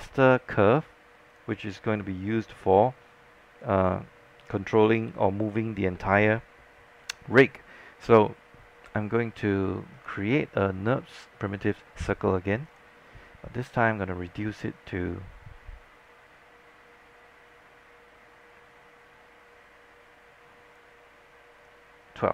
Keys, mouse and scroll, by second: 1.4-22.3 drag.